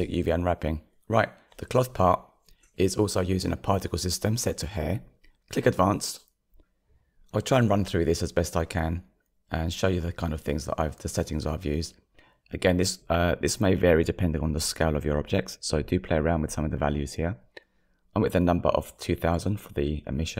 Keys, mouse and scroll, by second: 0.0 shift+middle click, 0.5 scroll up 2, 10.4-20.3 drag.